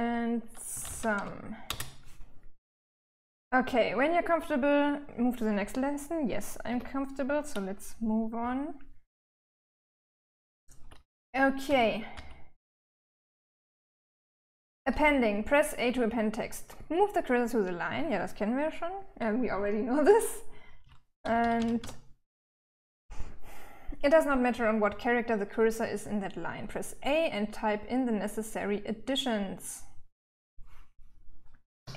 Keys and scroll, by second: 0.0-1.1 typing, 6.1 Escape, 7.8-11.5 typing, 12.6 k, 19.9-21.7 typing, 31.2 shift+a.